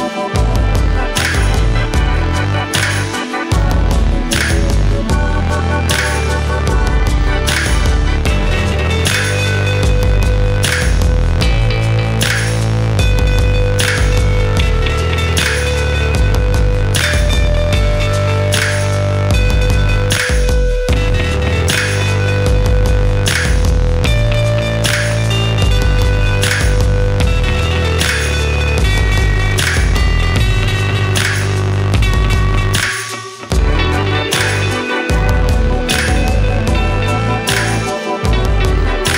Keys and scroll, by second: 8.4 ctrl+g, 27.1 ctrl+z.